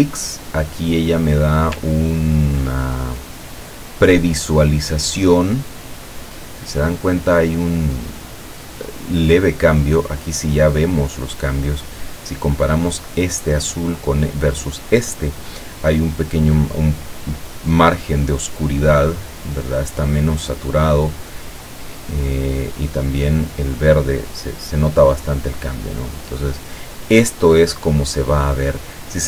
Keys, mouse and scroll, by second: 1.9-2.5 ctrl+scroll down 2, 3.2 ctrl+click, 4.3 click, 5.1 click, 5.7 click, 7.7-9.0 drag, 9.5 click, 11.4-12.9 drag, 21.4-22.6 drag, 25.7-27.4 drag.